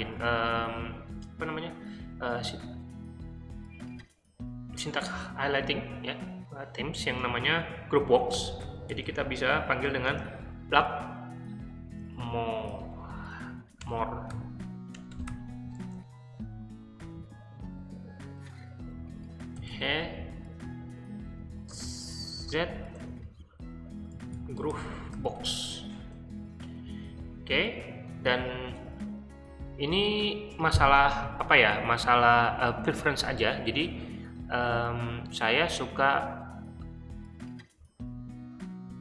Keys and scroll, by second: 8.0-10.0 typing, 11.3-15.5 typing, 19.3-20.1 typing, 21.3 t, 22.4-25.9 typing, 26.9 ', 28.6 Return.